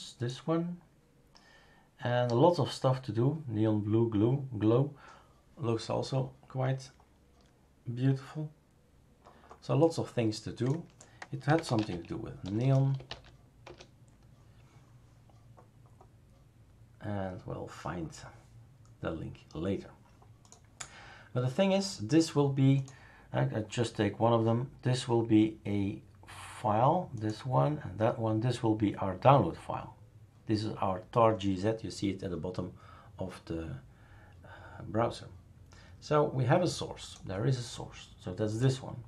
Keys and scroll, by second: 11.2-13.6 typing, 13.6 Return.